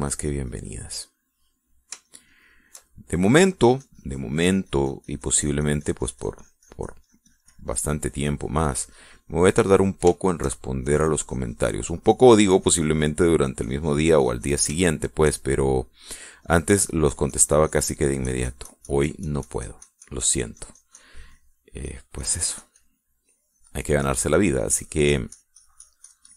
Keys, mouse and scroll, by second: 1.8-3.7 middle drag, 4.0-10.8 drag, 10.9 shift+middle click, 11.6-15.4 shift+drag, 15.5 shift+middle click, 16.1 shift+middle click, 16.7 shift+middle click, 17.2-25.3 drag, 25.6-26.3 drag.